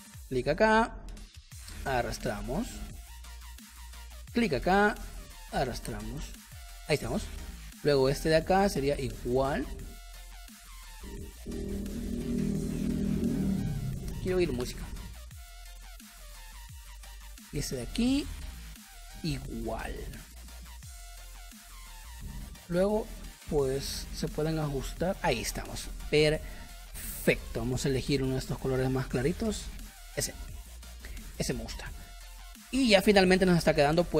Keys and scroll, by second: 3.4 space, 7.0 space, 10.1 space, 21.7 a, 26.1 v, 27.7 i, 30.0 v, 32.3 space, 33.1 space.